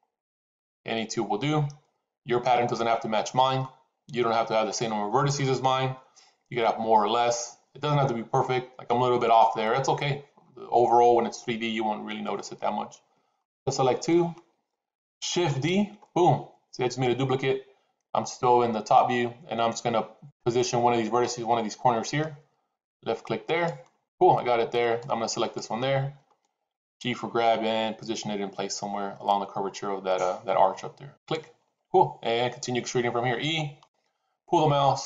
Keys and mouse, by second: 13.4 click, 15.3 shift+d, 24.9 click, 26.9 g, 33.4 e.